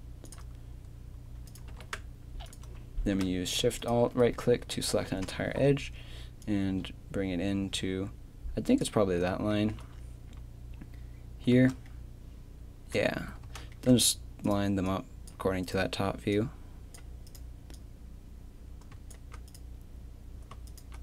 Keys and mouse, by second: 1.5 right click, 1.7 g, 3.0 right click, 3.0 a, 3.8 right click, 5.2 KP_7, 9.0 z, 11.5 z, 13.1 z, 13.5 z.